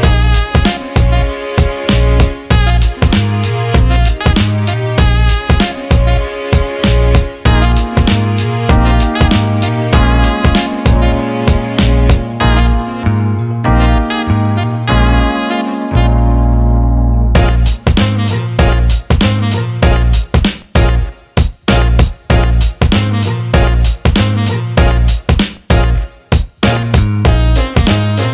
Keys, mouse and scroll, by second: 0.1 click, 1.1 alt+middle click, 2.6 alt+middle click, 9.5 click, 12.3 click, 13.1 alt+middle click, 13.9 click, 14.2 alt+middle click, 16.4 alt+shift+middle drag, 17.2 alt+shift+middle drag, 17.5 alt+middle click, 18.4 click, 19.2 alt+shift+middle click, 21.8 alt+shift+middle drag, 22.3 click, 23.0 Tab, 24.9 click, 25.8 click, 26.0 alt+shift+middle click.